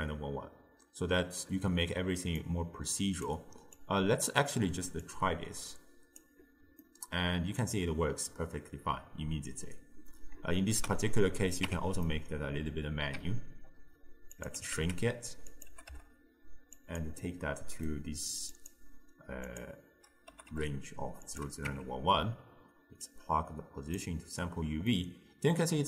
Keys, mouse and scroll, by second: 2.4 click, 3.8 click, 5.1 drag, 6.9-9.9 middle drag, 10.6 ctrl+right click, 11.7 Tab, 12.1-13.3 middle drag, 13.3 s, 14.6 g, 15.7 g, 17.2-18.6 middle drag, 18.6 click, 19.5 click, 20.4 g, 21.7 Tab, 23.1 click, 24.9-25.8 middle drag.